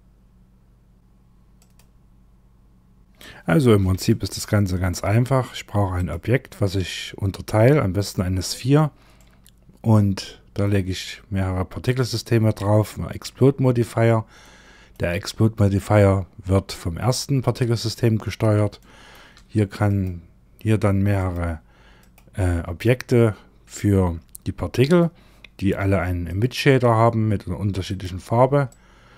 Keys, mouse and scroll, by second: 1.0 click, 2.7 click, 3.5 shift+middle click, 4.4-5.4 scroll down 3, 5.4 click, 6.5-7.4 scroll up 4, 8.6 middle click, 13.8 shift+middle click, 17.8-18.2 scroll down 2, 18.2 shift+middle click, 19.3 click, 20.6 click, 21.4 click, 22.3 middle click, 25.7 click, 27.3 click.